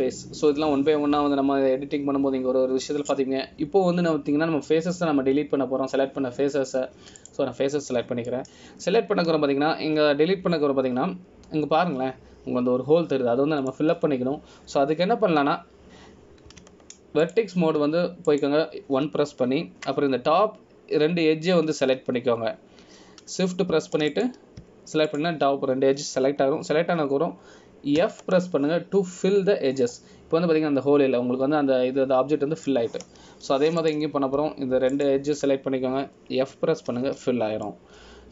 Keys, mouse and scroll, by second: 10.5 middle click, 19.4 click, 20.4 shift+click, 26.3 click, 27.2 shift+click, 30.1 f, 32.1 middle click, 36.0 click, 37.1 shift+click.